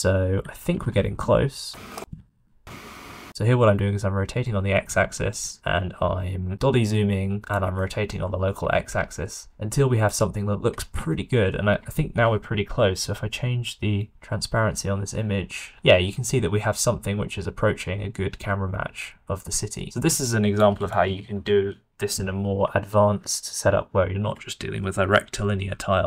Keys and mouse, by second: 0.7 r, 4.9 q, 7.7 shift+middle click, 10.0 click, 11.1-11.4 shift+middle drag, 14.0-17.7 middle drag, 20.6 middle click, 21.6-23.3 middle drag.